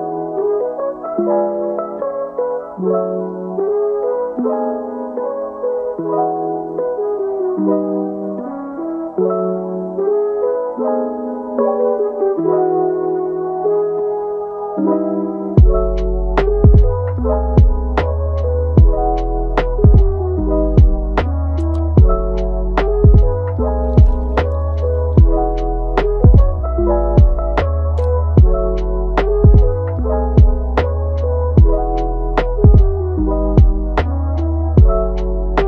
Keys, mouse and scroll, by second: 0.1 g, 1.1 g, 3.7 ctrl+t, 4.9 a, 5.4 ctrl+t, 8.0 scroll down 1, 8.3-11.0 middle drag, 11.0 Tab, 11.4-13.1 middle drag, 13.1 Tab, 13.6 click, 15.3 g, 16.8 click, 17.0 g, 18.6-18.9 middle drag, 18.9 g, 19.5-20.2 middle drag, 20.2 click, 20.4 g, 21.3 g, 22.2 Tab, 22.5-23.7 middle drag, 23.7-24.3 scroll down 1, 24.3-24.7 middle drag, 24.7 Tab, 25.2 click, 25.7-26.3 middle drag, 26.3 click, 26.7 g, 27.6-28.1 middle drag, 28.1 click, 28.3 g, 29.7-31.3 middle drag, 31.3 click, 31.7 alt+s, 32.3 Tab, 32.7-33.0 middle drag, 33.0-33.4 scroll up 1, 33.4 click, 34.8 g.